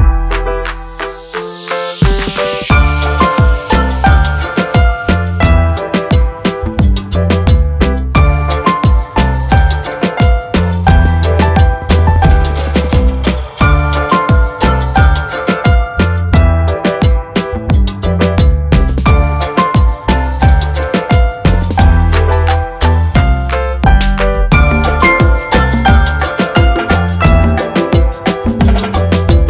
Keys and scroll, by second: 2.7 r, 3.0 z, 13.2 Tab, 21.9 Delete, 25.8 a.